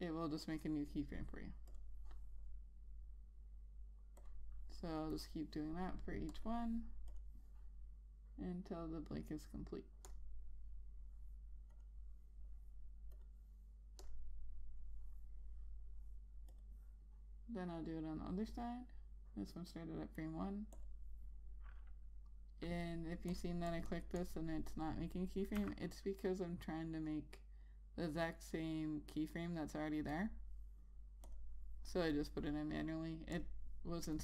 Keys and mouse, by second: 2.3 click, 21.4 click, 24.3 double click, 26.2 F6, 30.8 click.